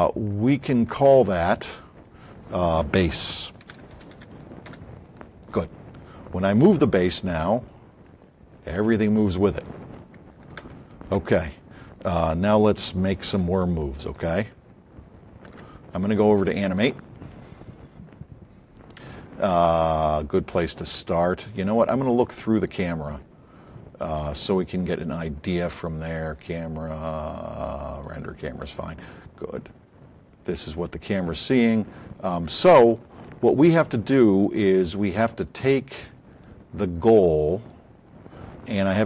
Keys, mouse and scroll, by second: 3.4-4.6 typing, 4.7 Return, 7.6-9.8 drag, 10.6 ctrl+z, 14.0-15.5 alt+drag, 18.0-18.7 typing, 21.1 a, 25.6 click, 28.7-30.6 alt+drag, 36.4 click.